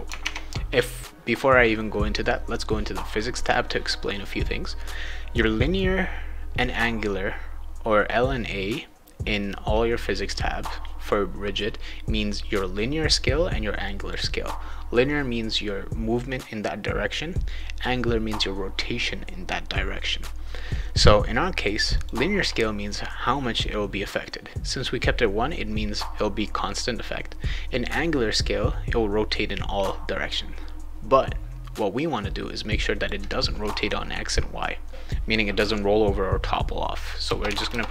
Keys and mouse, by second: 0.2 alt+Tab, 2.5 click, 5.6 click, 6.7 click, 12.7 click, 13.8 click, 21.9 click, 32.8 click, 37.4 Tab.